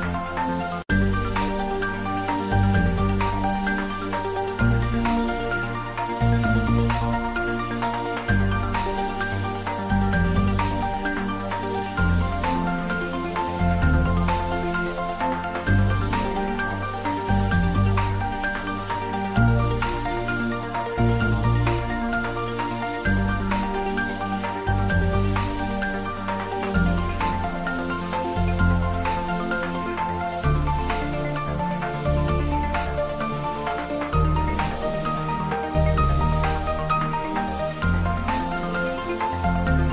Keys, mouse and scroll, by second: 0.1 r, 2.0 x, 3.5-4.6 typing, 3.9 click, 5.4 click, 5.6 Tab, 6.5 1, 8.1 click, 8.7 click, 9.2 shift+z, 9.5-11.5 drag, 11.5 click, 12.5-15.0 drag, 15.0 x, 15.5 click, 15.8 Tab, 17.4 s, 18.1 click, 18.4 ctrl+middle click, 18.7 shift+middle click, 19.2 ctrl+middle click, 19.7 shift+middle click, 20.1 Tab, 21.0 click, 22.1 g, 22.8 click, 23.8 scroll down 1, 25.1-25.6 scroll up 1, 25.6 g, 26.6-27.1 scroll down 1, 28.2-29.2 scroll up 1, 32.0-33.6 scroll down 1, 38.3 click, 38.9 Tab, 39.7 r.